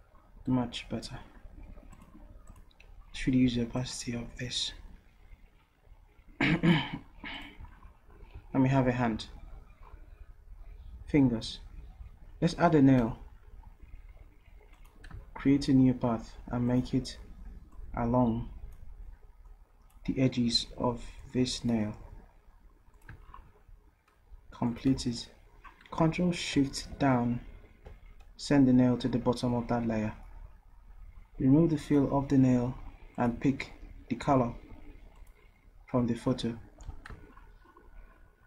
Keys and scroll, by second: 24.9 v, 26.9 ctrl+shift+Down, 36.8 v.